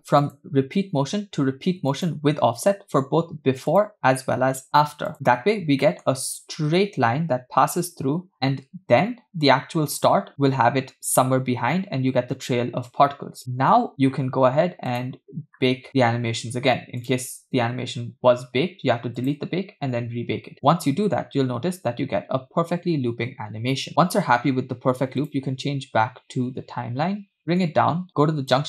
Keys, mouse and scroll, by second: 0.3-2.2 drag, 3.7-5.1 drag, 5.5-5.8 scroll down 2, 5.9 middle click, 8.3 space, 8.7 space, 9.5 click, 14.9-15.4 drag, 15.7 scroll up 3, 15.9 scroll down 4, 17.1 click, 17.8-18.4 scroll down 3, 19.3-19.9 drag, 20.6 space, 25.2-27.4 drag, 27.7 click.